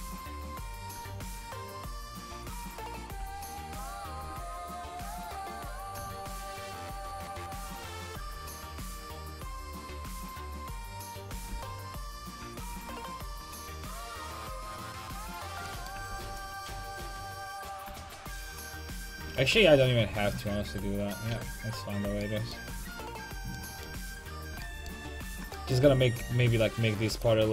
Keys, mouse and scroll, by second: 0.4-2.7 drag, 11.3 a, 11.5 c, 13.3-15.3 drag, 16.0 a, 16.1 c, 17.8-19.7 drag, 19.4 ctrl+z, 19.7 ctrl+z, 19.8 ctrl+z, 20.1 ctrl+z, 20.2 ctrl+z, 20.6 ctrl+z, 21.3 a, 26.2 c.